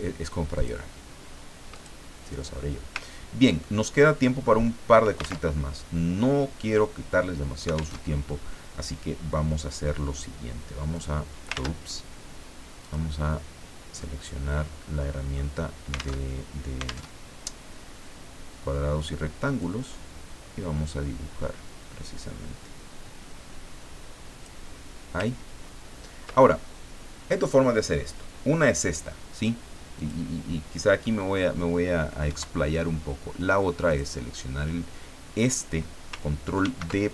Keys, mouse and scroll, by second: 0.5 click, 1.8 click, 3.0 ctrl+scroll down 2, 3.9 ctrl+click, 5.5 alt+Tab, 7.9 alt+Tab, 10.9 click, 11.5 ctrl+z, 12.8 click, 14.0 middle click, 14.2-15.6 drag, 16.2 alt+Tab, 17.1 alt+Tab, 19.6-25.0 drag, 25.4-26.1 ctrl+scroll up 4, 29.9 click, 32.3 Delete, 33.9 click, 36.6 ctrl+d.